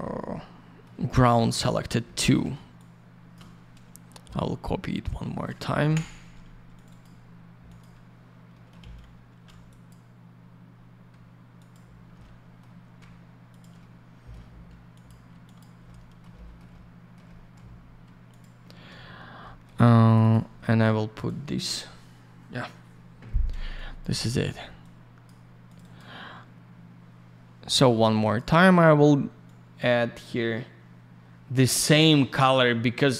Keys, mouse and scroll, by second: 0.0 alt+middle click, 1.4 middle click, 2.0 middle click, 2.7 shift+click, 5.0 click, 5.8 Delete, 6.7 click, 6.8 click, 7.0 double click, 7.6 click, 7.7 click, 8.5 middle click, 8.8 alt+shift+й, 9.4 й, 9.6 click, 9.8 click, 10.7 scroll up 1, 11.5 ctrl+click, 11.7 ctrl+click, 12.2 alt+middle click, 13.5 ctrl+click, 13.5 ctrl+click, 13.7 middle click, 14.9 ctrl+click, 15.0 ctrl+click, 15.4 click, 15.5 click, 15.8 middle click, 16.3 middle click, 17.2 middle click, 17.7 scroll up 1, 18.3 ctrl+click, 18.4 ctrl+click, 19.4 middle click, 20.0 click, 20.1 click, 20.2 click, 20.3 double click, 21.1 click, 21.2 click, 23.7 click, 24.8 click, 25.6 click, 25.7 click, 25.8 click, 25.9 double click, 28.2 click, 28.3 click, 29.4 click.